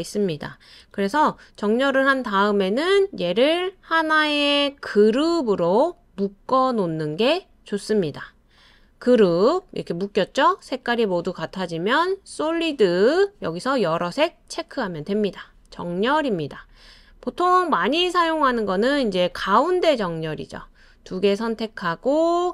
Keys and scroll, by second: 0.9 super+z.